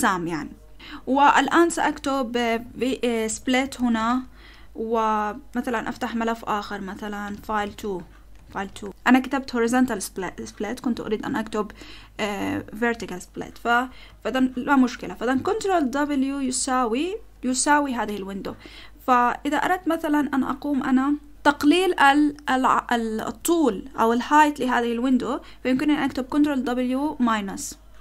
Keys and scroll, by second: 2.6-5.6 typing, 7.0-8.5 typing, 8.6 Tab, 15.8 ctrl+w, 16.4 =, 26.4 ctrl+w, 26.9 ctrl+w, 27.2 -.